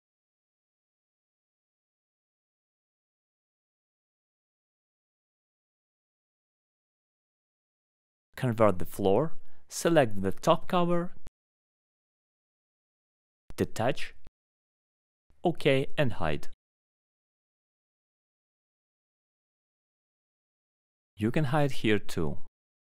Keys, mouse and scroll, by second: 1.4 alt+middle click, 2.0 middle click, 2.0-2.5 scroll down 3, 2.6 alt+middle click, 3.0 middle click, 3.0-3.3 scroll up 3, 3.5 click, 3.8 scroll up 1, 3.9 alt+middle click, 5.0 scroll, 6.0 scroll down 3, 6.3 scroll up 4, 6.8 alt+middle click, 7.8 scroll down 1, 8.4 click, 8.6 scroll up 2, 8.7 scroll, 9.7 alt+middle click, 10.0-10.5 scroll up 3, 10.2 middle click, 11.0 right click, 12.6 click, 13.0-13.5 scroll, 14.6 click, 15.3 alt+middle click, 17.8 middle click, 19.6 click, 20.5 click, 21.0 middle click, 21.3 right click, 22.5 click.